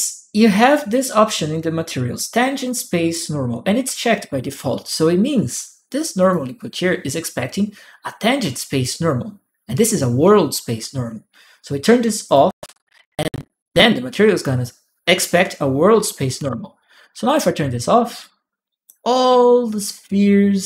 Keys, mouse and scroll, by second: 6.0 click, 12.0 click, 14.9 click, 16.2 shift+p, 17.0 click, 18.0-20.6 drag.